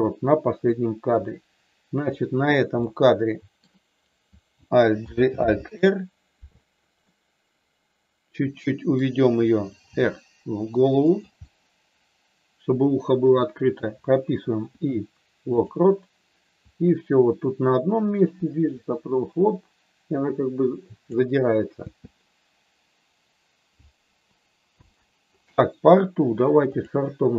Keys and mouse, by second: 0.6 middle click, 2.0 click, 2.7 middle click, 5.0 alt+g, 7.0-9.0 middle drag, 9.7 r, 11.0 click, 11.4-13.4 middle drag, 14.6 i, 16.6-21.1 drag, 21.9 space, 26.9 click.